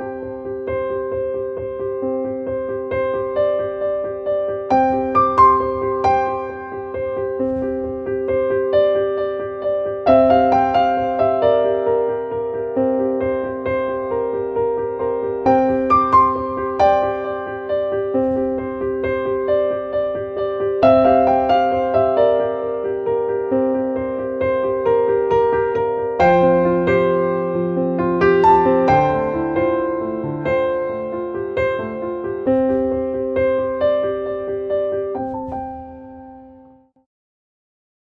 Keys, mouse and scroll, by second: 0.2 click, 4.3 click, 7.7 click, 8.8-10.6 drag, 11.1-17.1 drag, 17.3 right click, 18.1 click, 19.5-20.5 scroll down 1, 20.5 click, 21.6-25.2 drag, 25.4-26.8 drag, 28.3-32.5 drag, 33.2 click.